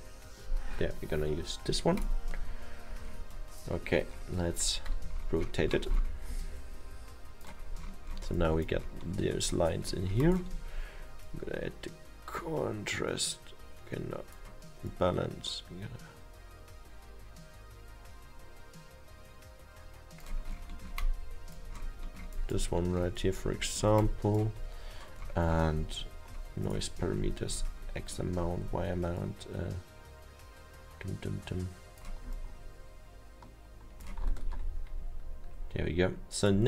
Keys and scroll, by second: 1.6 a, 7.0 F1, 34.5 ctrl+z.